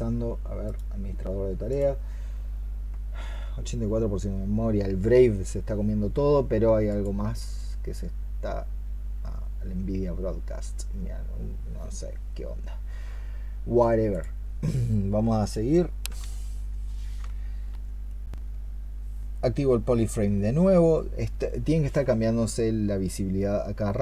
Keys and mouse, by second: 0.5 right click.